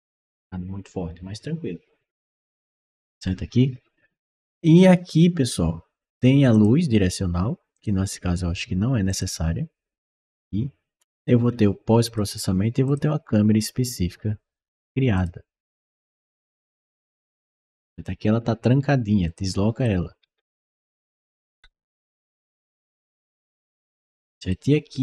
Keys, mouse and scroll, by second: 6.4 click, 7.6 click, 8.9 click, 10.8-11.2 scroll up 1, 11.3 scroll down 1, 11.9 click, 12.7 click, 15.0 click, 16.0 click, 17.0 right click, 19.1 click, 19.7-24.4 right drag, 20.1 s, 21.4 d, 21.8 s, 23.5 w.